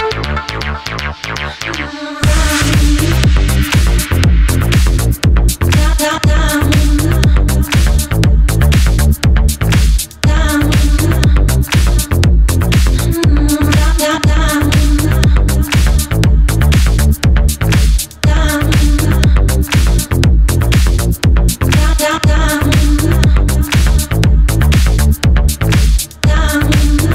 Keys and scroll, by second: 8.7 super+v, 8.8 Return, 10.2 Return, 11.9 Up, 12.1 Down, 12.3 Left, 15.9 Right, 19.2-20.2 typing, 22.6-23.5 typing.